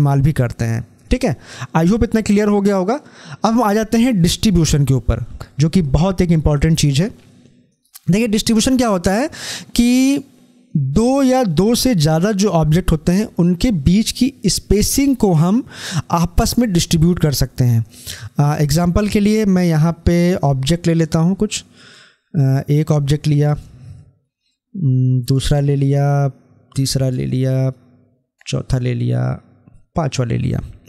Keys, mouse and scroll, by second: 4.3 click, 8.0 scroll down 1, 9.3-12.4 drag, 19.0-30.8 drag.